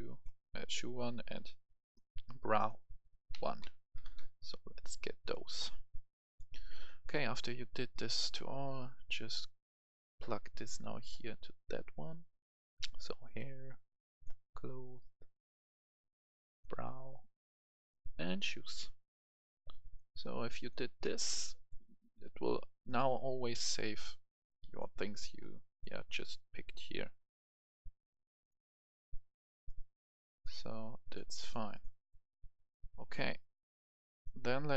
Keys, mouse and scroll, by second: 0.0-0.1 typing, 3.2-3.9 typing, 5.2 click, 7.1 right click, 8.9-31.3 drag, 34.2 right click.